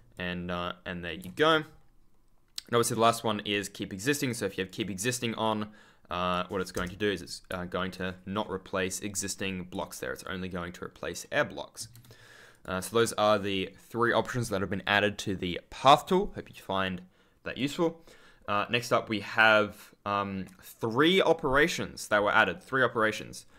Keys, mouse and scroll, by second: 0.1 ctrl+click, 1.1 ctrl+z, 3.4 click, 4.1 right click, 5.3 click, 6.7 Return, 7.9 ctrl+click, 8.0-9.2 scroll up 1, 9.2-9.8 scroll down 1, 10.1 ctrl+click, 11.7 ctrl+z, 12.4 click, 17.5 click, 23.2 ctrl+click, 23.4 ctrl+scroll up 1.